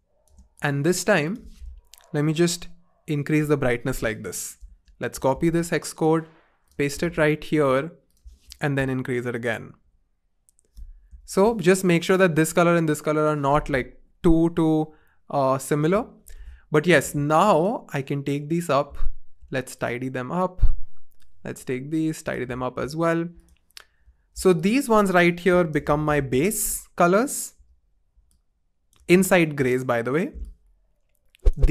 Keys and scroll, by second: 2.4 shift+Up, 2.6 shift+Up, 3.0 shift+Up, 5.4 super+c, 7.0 super+v, 7.6 Return, 9.3 shift+Up, 9.6 shift+Up, 9.8 shift+Up, 14.2 shift+Down, 14.7 shift+Up, 14.9 shift+Up, 24.4 t, 25.5-27.5 typing, 29.1 typing.